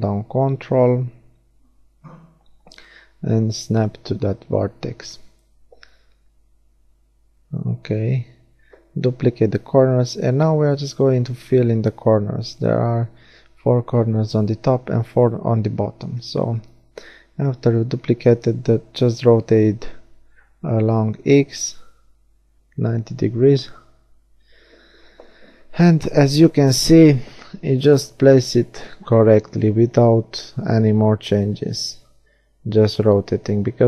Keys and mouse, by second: 2.0-4.6 drag, 4.6-7.2 middle drag, 7.2 shift+d, 11.7 r, 18.9-20.3 middle drag, 19.9 shift+d, 23.0 middle click, 24.7 r, 29.3-31.3 middle drag, 31.3 shift+d.